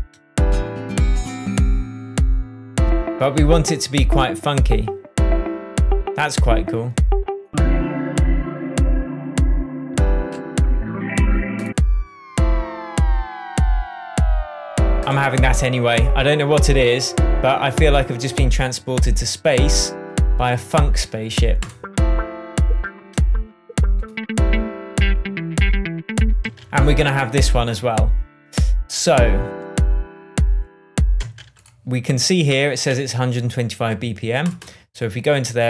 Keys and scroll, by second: 26.3 space, 31.1 space.